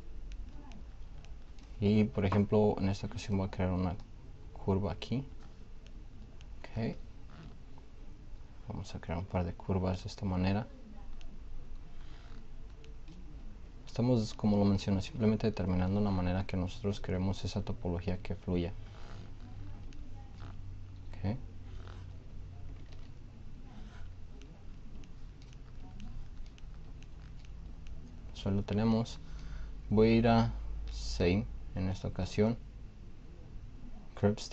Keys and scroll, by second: 22.8 ctrl+z.